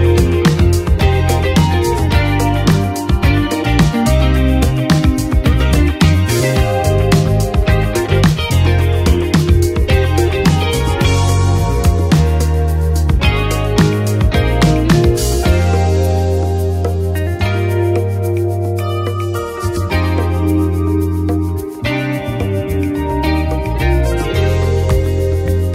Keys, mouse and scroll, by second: 3.6 click, 5.8 ctrl+d, 7.3 Return, 8.0 Right, 8.0 Return, 9.7 shift+Left, 10.9 BackSpace, 13.5-18.4 drag, 18.6-21.7 drag.